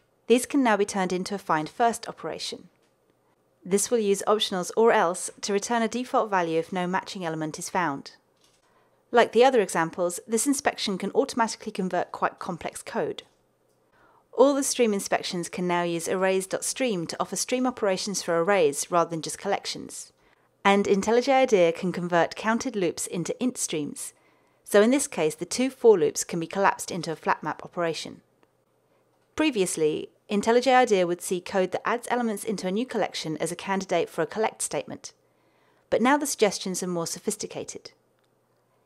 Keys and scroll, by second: 13.2 alt+Return.